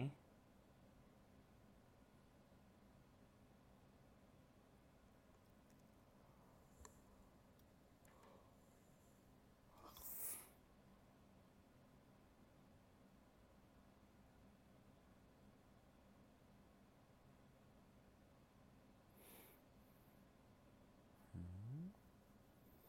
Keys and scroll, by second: 6.9 alt+space, 9.6 alt+space, 10.8 alt+space, 12.1 alt+space, 14.9 ctrl+z, 16.1 alt+space, 18.9 alt+space, 20.7 ctrl+z.